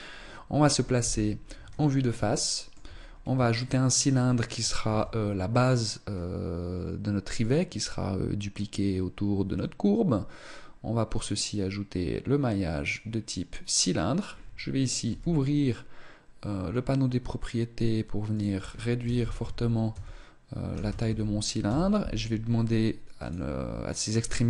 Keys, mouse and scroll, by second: 0.7 KP_1, 2.0 shift+middle click, 2.8-3.1 scroll up 4, 3.3 shift+middle click, 4.6 shift+a, 14.8 t, 18.1 click, 23.0 click.